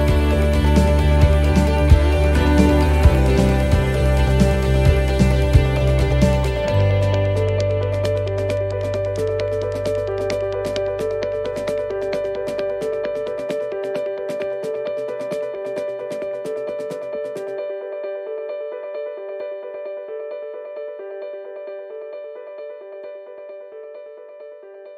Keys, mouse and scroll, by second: 1.4 e, 2.9 shift+middle click, 5.9 right click, 6.8 shift+right click, 7.6 middle click, 9.6 ctrl+z, 9.9 ctrl+z, 10.1 ctrl+z, 10.3 ctrl+z, 10.4 ctrl+z, 11.1 ctrl+z, 11.7 right click, 12.4 shift+right click, 15.9 shift+d, 16.5 middle click, 18.0 click, 19.0 shift+middle click, 20.5 e, 23.2 right click, 24.0 shift+right click.